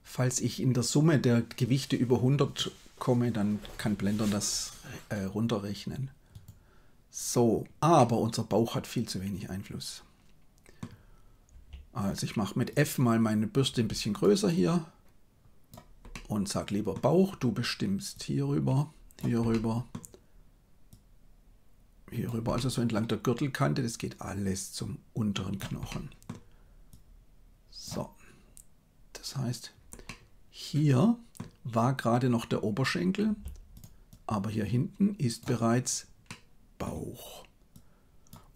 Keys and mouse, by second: 7.9-10.8 middle drag, 11.6 f, 13.8 f, 14.5-15.6 drag, 16.1 middle click, 18.1-19.5 drag, 19.5 middle click, 20.8-22.3 drag, 22.5 middle click, 23.5-25.7 drag, 25.8 middle click, 26.9-27.9 drag, 30.0-31.3 middle drag, 33.3 f, 34.2-35.4 drag, 36.2 middle click, 37.8 click.